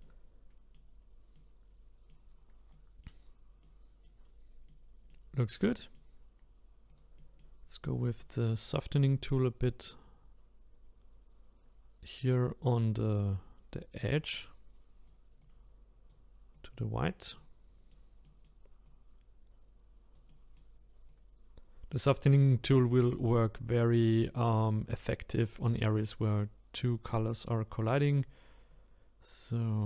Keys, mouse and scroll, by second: 0.0-1.0 middle drag, 1.0-1.3 scroll down 1, 1.3-2.4 middle drag, 2.4-2.7 scroll down 2, 2.7 middle click, 3.2-3.6 scroll down 1, 3.6 middle click, 4.2-4.7 scroll up 1, 4.7-6.9 middle drag, 6.9 click, 7.2 middle click, 7.6-8.2 scroll up 3, 8.2 middle click, 9.1-12.2 drag, 15.4-17.3 drag, 17.3-18.8 middle drag, 18.8-20.3 drag, 20.3 middle click, 21.1-24.1 drag, 24.3 middle click, 25.1-28.1 drag, 28.7-29.8 drag.